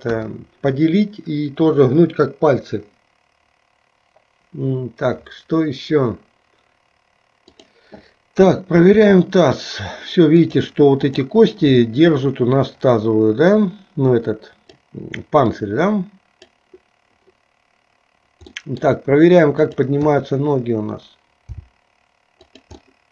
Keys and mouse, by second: 0.1 KP_1, 8.9 r, 11.2 click, 13.6-14.9 drag, 15.7 click, 18.6 middle click, 19.7 click, 20.1 KP_3, 21.7 g, 23.0-23.1 middle drag.